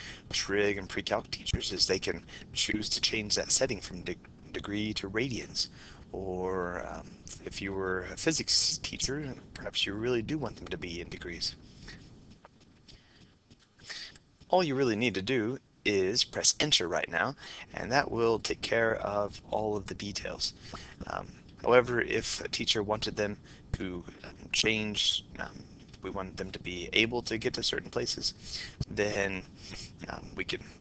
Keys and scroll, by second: 18.9 Down, 19.2 Down, 20.4 Down, 20.9 Down, 21.7 Down, 23.1 Down, 23.9 Down, 24.3 Down, 24.8 Down, 25.6 Down, 26.1 Down, 26.9 Down.